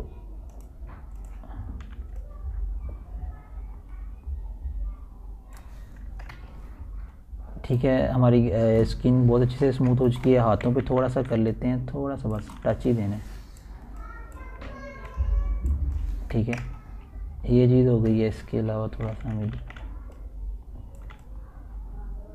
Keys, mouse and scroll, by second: 1.1 right click, 1.7 click, 3.2 right click, 3.8 click, 4.5 typing, 4.8-9.1 drag, 9.1 scroll down 1, 9.7 alt+scroll down 1, 10.1-13.6 typing, 11.3-12.5 scroll up 6, 13.5 scroll up 1, 14.1 click, 15.1 typing, 15.5-17.6 drag, 17.7 click, 18.6 scroll down 1, 19.3 ctrl+alt+scroll down 1, 20.1 scroll, 20.2 ctrl+alt+scroll up 1, 20.8 ctrl+scroll, 20.9 ctrl+alt+scroll down 2, 21.7-22.3 typing.